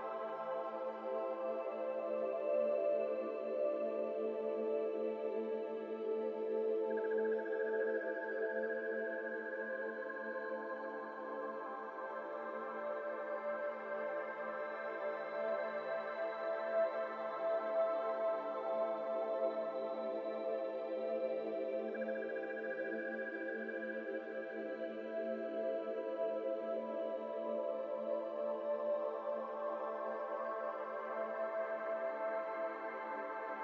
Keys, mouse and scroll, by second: 0.0 g, 2.2 Tab, 2.3-3.4 scroll down 4, 2.5-2.8 middle drag, 3.4-4.3 right drag, 4.3 scroll down 2, 4.4-4.7 middle drag, 4.7-5.5 right drag, 5.5-5.9 middle drag, 5.9 Tab, 6.1 shift+middle click, 6.3-6.7 scroll up 3, 6.7 shift+middle click, 7.7-8.0 scroll up 2, 8.0 middle click, 8.9 alt+click, 9.3 alt+click, 9.9 x, 11.2 alt+click, 12.5 alt+z, 13.5 x, 14.3 middle click, 14.7 alt+click, 15.4 f, 15.7 middle click, 16.0 Tab, 16.1-17.9 scroll down 12, 16.2-16.6 middle drag, 16.9 click, 17.2 middle drag, 17.9-20.4 shift+middle drag, 20.9-21.3 middle drag, 21.3 click, 21.5 Tab, 21.7 shift+middle click, 21.9-22.8 scroll up 2, 21.9 middle click, 22.8 alt+click, 23.3 middle click, 24.1 s, 26.0 middle click, 26.2 Tab, 26.4 scroll down 2, 26.4-26.9 middle drag, 26.9 Tab, 27.0-28.1 scroll up 3, 27.1 middle click, 28.1 middle click, 28.9 alt+click, 29.6 ctrl+b, 32.4 Tab, 32.5 scroll down 2, 32.7-33.1 middle drag, 33.1 Tab, 33.2 middle click, 33.4-33.6 scroll up 3.